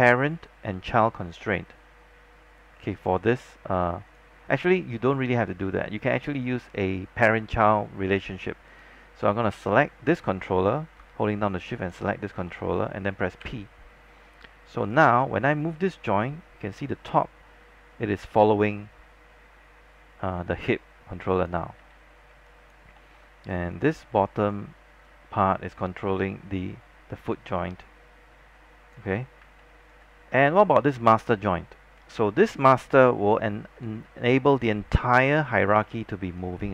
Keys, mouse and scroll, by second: 11.9 shift+click, 13.5 shift+p, 15.0-21.9 drag, 21.9 z, 22.6 alt+click, 23.2 alt+middle click, 23.8-29.0 drag, 29.0 z, 29.7 alt+middle click, 31.0 click, 35.9 alt+middle click.